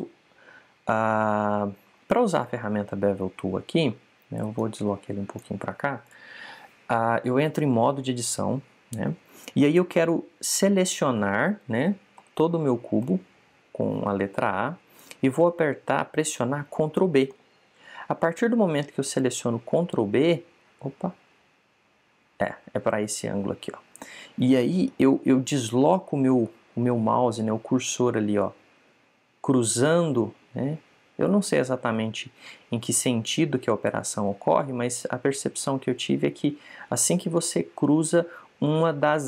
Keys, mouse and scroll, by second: 2.4-5.2 middle drag, 5.5 click, 6.9 right click, 8.8 Tab, 13.1 a, 13.3 a, 18.2 ctrl+b.